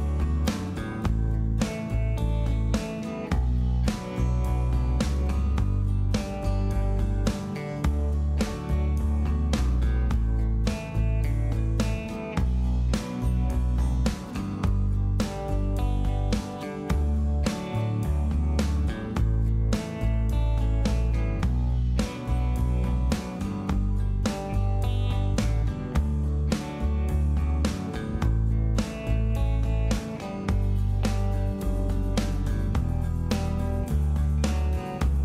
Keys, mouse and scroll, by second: 4.0 f, 32.8 F2, 33.2 typing.